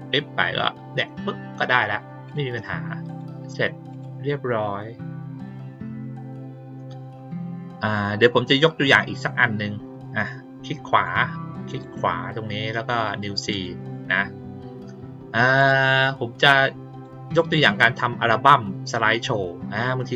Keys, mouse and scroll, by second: 2.2 click, 3.0 click, 3.9 click, 8.9 right click, 10.8 right click, 11.6 right click, 13.4 click, 15.5 click, 16.8 click.